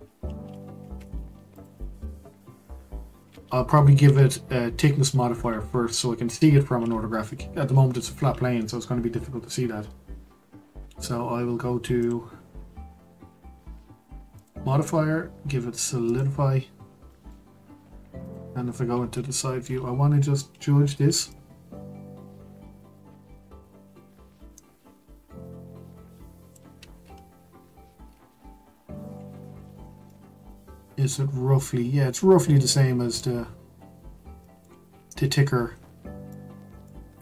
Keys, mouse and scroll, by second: 0.9 2, 1.5 click, 2.6-3.2 scroll down 2, 3.2-4.0 scroll up 1, 4.0 Tab, 12.0 click, 16.2 click, 17.1-18.2 middle drag, 18.2 click, 18.8-19.3 scroll up 2, 19.3-21.3 shift+middle drag, 21.3-24.3 shift+drag, 27.0-27.9 scroll down 3, 27.9-29.1 scroll down 3, 29.1-29.8 scroll up 5, 29.8 scroll down 2, 30.1-37.2 middle drag.